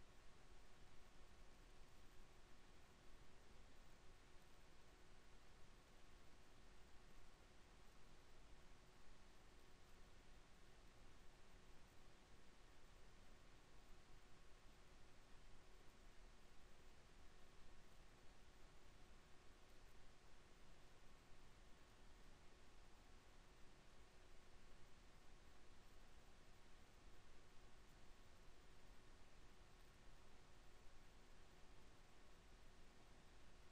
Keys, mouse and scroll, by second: 4.2 ctrl+r, 7.1 Tab, 8.5 Tab, 9.3 Tab, 15.3 ctrl+z, 17.1 ctrl+z, 17.4 ctrl+z, 17.9 ctrl+z, 20.3 Tab, 21.2 ctrl+r, 25.0 ctrl+r, 26.8 ctrl+r.